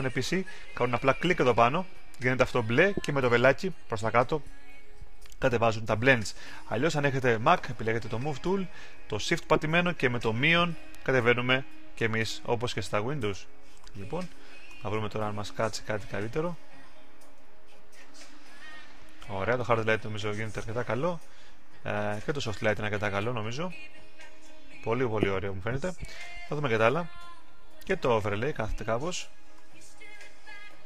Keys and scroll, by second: 11.1-17.9 typing, 20.7 shift+-, 26.1 shift+-, 29.5-30.8 typing.